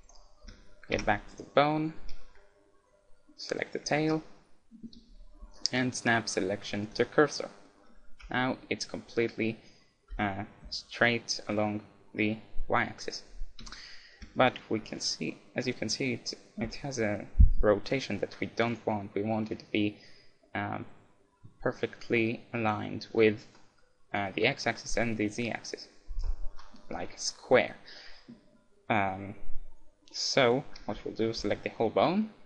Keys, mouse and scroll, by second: 0.0-3.3 right drag, 0.5 z, 1.0 Tab, 4.0 shift+s, 7.5-9.5 middle drag, 8.2 KP_1, 10.2 KP_7, 13.8 KP_1, 14.1-16.8 middle drag, 18.7-20.5 right drag, 23.6-28.8 middle drag, 31.5-32.4 middle drag.